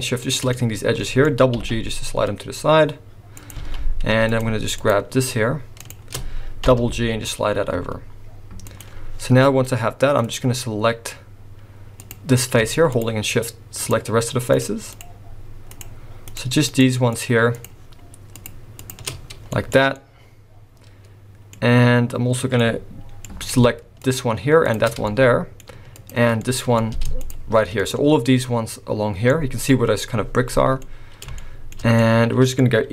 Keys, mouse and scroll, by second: 0.2 shift+click, 0.5 middle click, 1.6 g, 3.6 alt+a, 4.3 click, 4.8 shift+click, 5.8 click, 6.7 g, 10.3 click, 12.0 click, 12.9 shift+click, 13.8 shift+click, 14.5 click, 14.9 shift+click, 15.7 shift+click, 16.3 shift+click, 16.7 shift+click, 17.1 shift+click, 17.5 shift+click, 18.3 shift+click, 18.8 shift+click, 19.2 scroll down 2, 19.5 shift+middle click, 19.9 middle click, 22.6 middle click, 24.0 shift+click, 24.7 shift+click, 25.1 shift+middle click, 25.9 shift+click, 26.4 middle click, 27.2 shift+click, 27.8 shift+click, 29.3 middle click, 29.7-30.0 scroll up 3, 30.5-31.1 scroll down 3, 30.8 middle click, 31.4 shift+middle click, 32.0 middle click.